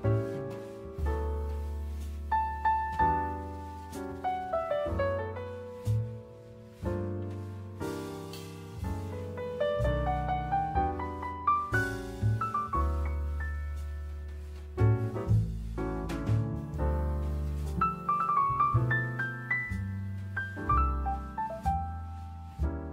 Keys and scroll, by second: 5.1 Escape, 6.6 Escape, 20.5 Escape.